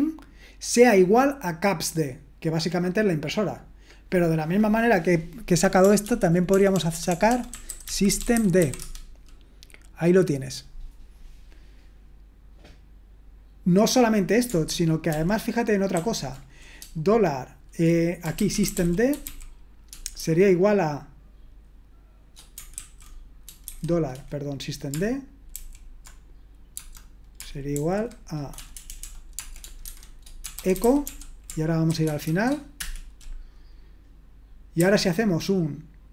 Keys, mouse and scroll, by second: 6.0 ctrl+p, 6.5-9.0 typing, 15.1 ctrl+p, 15.9 ctrl+a, 18.0-20.2 typing, 22.8 ctrl+a, 23.4-24.2 typing, 25.5 alt+f, 26.7 space, 27.7 alt+f, 28.9-30.7 typing, 31.9-32.8 typing, 34.8 typing.